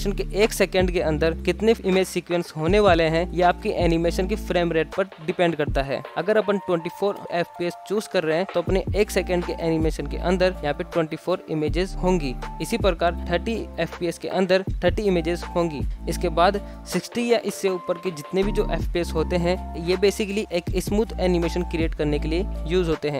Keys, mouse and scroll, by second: 6.1 click, 6.1 g, 6.8 scroll down 3, 7.0 shift+middle drag, 7.2-7.6 scroll up 1, 7.6 g, 8.1 i, 8.6 shift+Left, 8.7 space, 9.9 space, 10.8-13.0 drag, 13.3 shift+Left, 14.1 space, 15.3 space, 16.2-17.8 drag, 17.8 shift+Left, 18.2 space, 19.1 space, 21.6 click, 22.5 space.